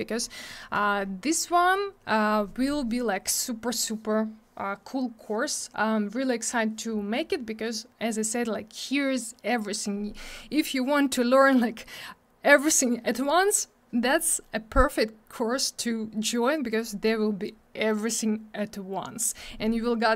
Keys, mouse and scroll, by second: 0.5-1.0 scroll up 2, 1.4 scroll up 1.